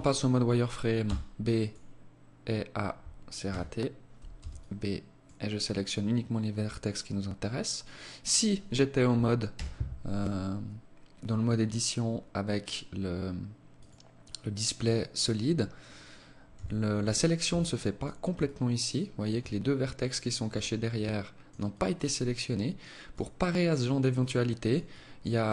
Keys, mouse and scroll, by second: 0.3 b, 2.7 a, 3.7 b, 8.7 z, 12.9 click, 15.7 a, 16.6 b, 17.6 alt+click, 20.1 alt+click, 20.9 alt+click, 21.5 alt+click, 22.7 alt+click, 23.4 alt+click, 24.1 alt+click, 24.7 alt+click.